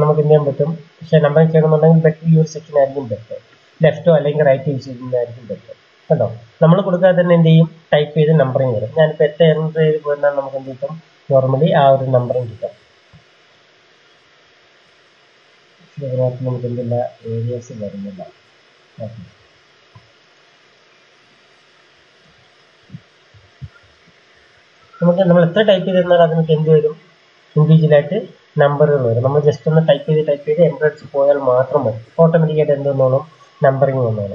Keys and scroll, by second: 8.9 Return, 9.1 Return, 9.2 Return, 9.5 Return, 12.7 Return, 14.1 s, 14.3 Return, 20.5 BackSpace, 21.3 BackSpace, 22.1 Return, 22.7-25.0 typing, 23.2 Return.